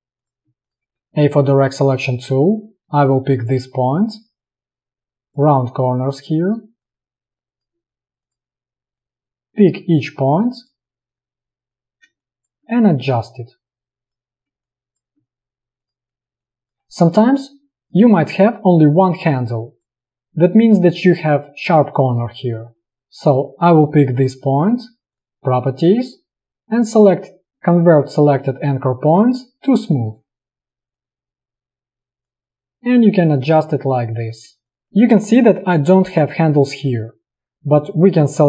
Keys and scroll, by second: 1.0 a, 3.1 space, 12.2 space, 16.8 a, 22.8 ctrl+z, 34.7 space, 35.3 space.